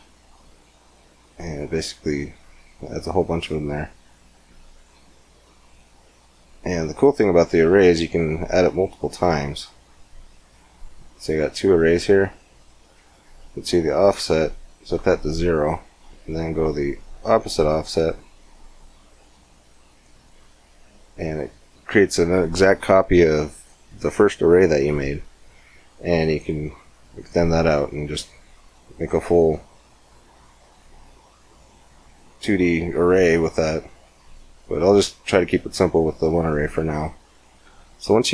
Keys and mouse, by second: 7.8-9.6 drag, 9.6-12.8 middle drag, 12.8-16.0 drag, 16.0-17.4 middle drag, 17.4-29.3 drag, 29.3 middle click, 29.6 click, 34.4-37.6 drag, 37.6 middle click.